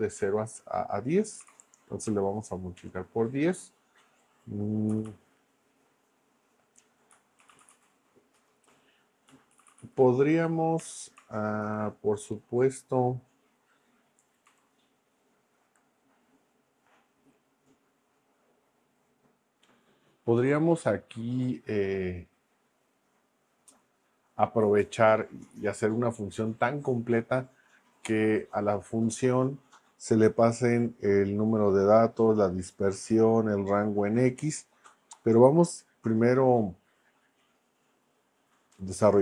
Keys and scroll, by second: 1.2-2.8 typing, 4.7-5.5 typing, 6.9-10.3 typing, 8.4 Return, 10.8 Return, 11.6 shift+9, 14.5 0.